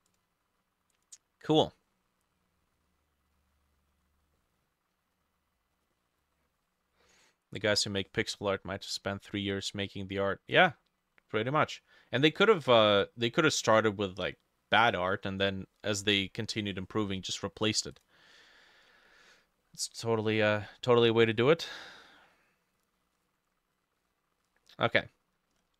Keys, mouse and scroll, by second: 0.1 double click, 1.9 middle click, 3.4 middle click, 3.9-4.4 scroll up 2, 4.4 middle click, 6.0 middle click, 6.4-6.7 scroll up 1, 6.7-7.1 scroll down 1, 7.1 middle click, 7.7 ctrl+s, 11.6 middle click, 14.1 scroll down 2, 14.4 middle click, 18.7-19.1 scroll down 5, 19.1 middle click, 19.7 middle click, 20.3-21.0 scroll down 5, 21.0 middle click, 22.0 middle click, 24.0 middle click, 24.4 middle click, 25.0 middle click, 25.5-25.7 scroll up 7.